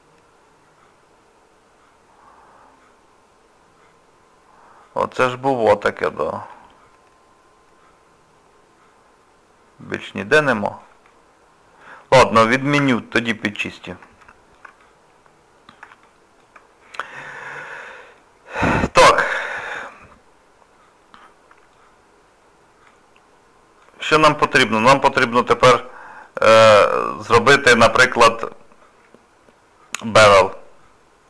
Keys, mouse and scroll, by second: 5.6 shift+middle click, 6.5 middle click, 10.5 shift+middle click, 12.8 ctrl+z, 13.4 middle click, 14.2 shift+middle click, 14.8 middle click, 16.0 shift+middle click, 16.9 middle click, 18.6 middle click, 19.4 shift+middle click, 19.9 middle click, 22.1-22.9 scroll up 2, 22.9 middle click, 24.2 scroll down 2, 24.6 shift+middle click, 25.1 middle click, 26.5 scroll up 2, 26.6 scroll down 1, 27.0 shift+middle click, 27.5 middle click, 28.6-29.5 scroll up 1, 30.5 middle click.